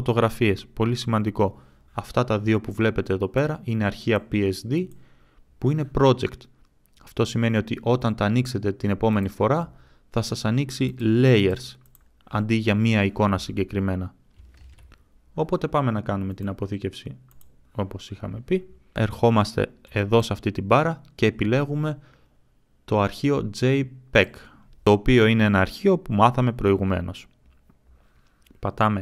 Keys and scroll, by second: 14.5 ctrl+s.